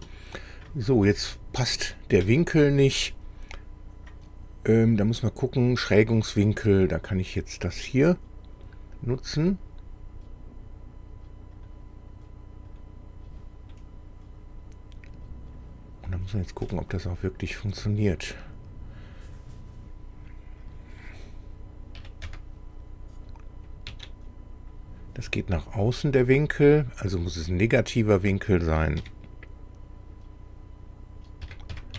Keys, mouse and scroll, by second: 7.7 click, 11.6 click, 12.7 click, 13.7-15.3 middle drag, 16.2 scroll up 1, 16.7-17.8 middle drag, 18.3-18.6 scroll down 1, 20.7 click, 22.0 KP_1, 22.3 KP_0, 23.9 Tab, 25.3-26.5 middle drag, 27.3 click, 29.0 KP_Subtract, 31.5 KP_4, 31.7 KP_5.